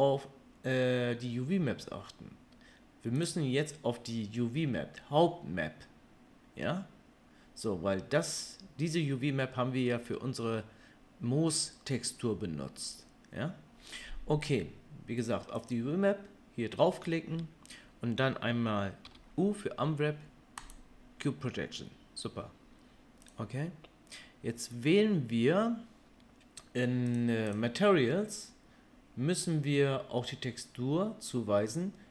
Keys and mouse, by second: 3.2 click, 3.3-15.6 middle drag, 15.6 click, 15.7-27.5 middle drag, 19.0 u, 27.5 click, 27.6-32.1 middle drag.